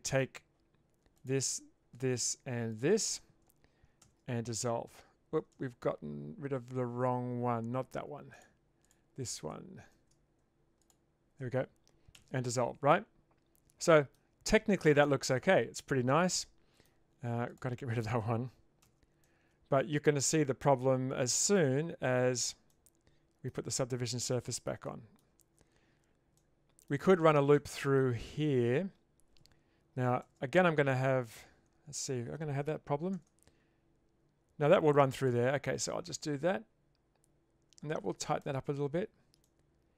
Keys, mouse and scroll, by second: 1.2 click, 1.9 shift+click, 2.7 shift+click, 4.0 ctrl+x, 5.5 ctrl+z, 8.4 shift+click, 8.9 shift+click, 9.9 ctrl+z, 10.8 shift+click, 12.2 ctrl+x, 12.9-14.1 middle drag, 16.2 middle click, 17.5 alt+click, 18.8 ctrl+x, 19.3-21.5 middle drag, 21.7 Tab, 22.7-23.5 middle drag, 24.3-24.7 shift+middle drag, 24.9 middle click, 25.4 Tab, 26.5-26.9 middle drag, 27.5-28.0 shift+middle drag, 30.2 ctrl+r, 33.1 ctrl+r, 38.7 Tab, 39.4 middle click.